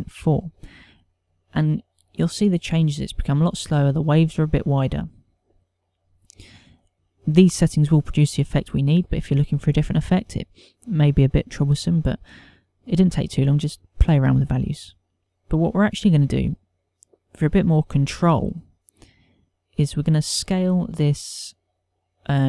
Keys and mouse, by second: 6.9 ctrl+middle click, 7.1 shift+middle click, 15.2 ctrl+click.